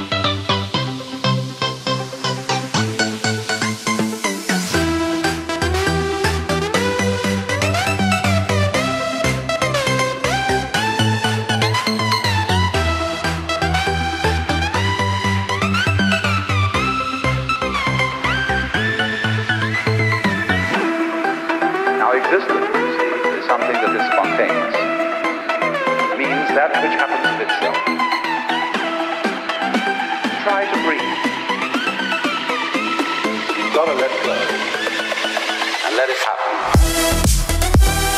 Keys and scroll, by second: 4.1 ctrl+t, 9.6 ctrl+=, 28.0 ctrl+0, 37.0 ctrl+=.